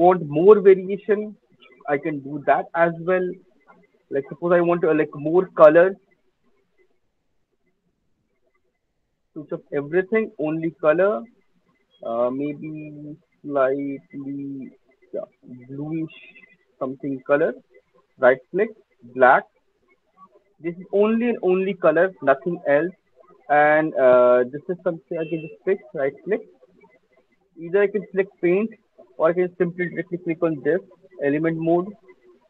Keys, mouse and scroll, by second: 6.8 click, 7.3-8.1 scroll down 4, 8.4 click, 8.8 click, 9.0 click, 9.3 scroll, 9.4 click, 10.0-10.4 scroll, 11.0 click, 14.3 click, 17.0 click, 17.9 click, 18.9 click, 26.1 right click, 28.4 click, 29.3 right click, 31.3 right click.